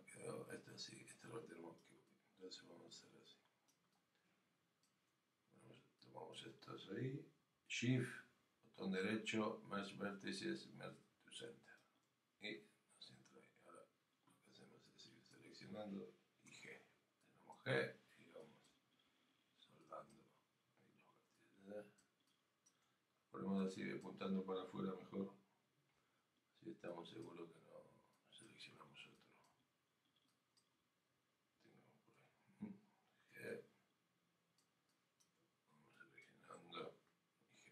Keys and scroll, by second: 27.2 g.